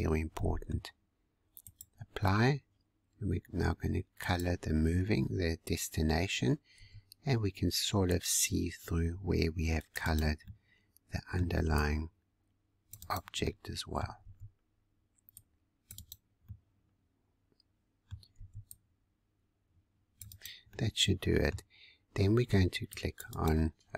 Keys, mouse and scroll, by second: 0.3-1.6 middle drag, 1.6-6.7 drag, 6.7 c, 10.4-11.5 middle drag, 11.5 c, 13.4 middle click, 14.1 c, 16.4-18.3 middle drag, 18.3 c, 20.7-22.5 middle drag, 22.5 c.